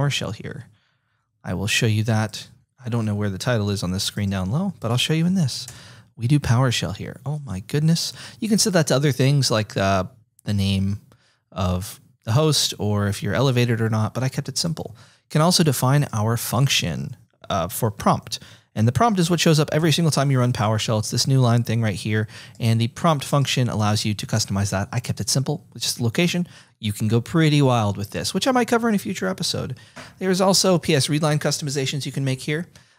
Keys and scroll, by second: 19.8 F8.